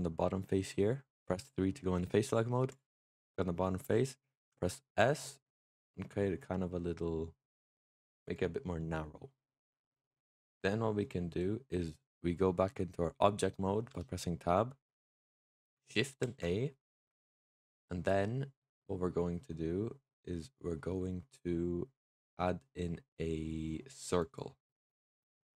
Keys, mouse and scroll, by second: 2.6 click, 3.0-4.3 middle drag, 4.3 s, 8.1 click, 8.7-10.2 middle drag, 10.2-12.5 middle drag, 12.5 Tab, 13.8 Tab, 16.1 shift+a, 24.8-25.5 middle drag.